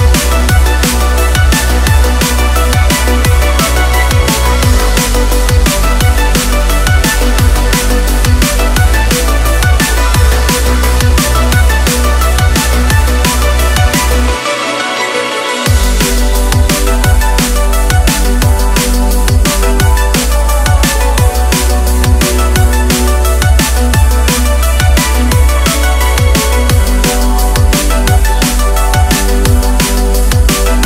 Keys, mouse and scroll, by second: 8.7 click, 10.2 click, 10.6 click, 11.2 click, 12.0 click, 14.3 click, 14.7 click, 15.6-16.1 scroll up 1, 16.2 click, 19.0 click, 19.9 click, 20.4 click.